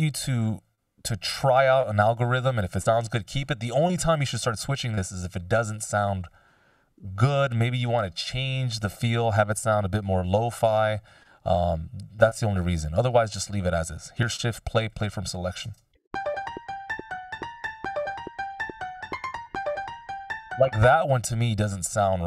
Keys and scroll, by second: 15.7 shift+space, 19.0 k, 20.1 space.